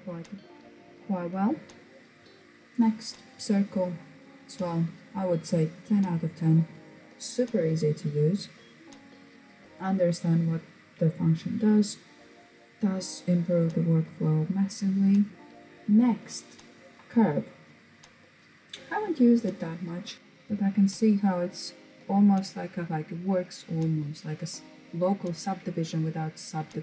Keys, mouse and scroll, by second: 3.9 click.